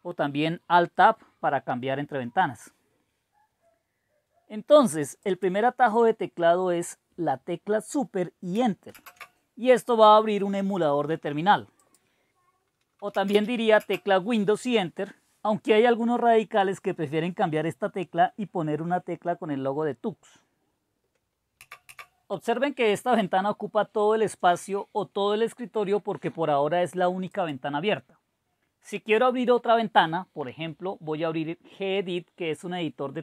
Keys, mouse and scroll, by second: 5.3 click, 8.9 super+Return, 11.8 click, 12.6 click, 12.8-13.8 typing, 13.9 Return, 27.3-28.7 drag.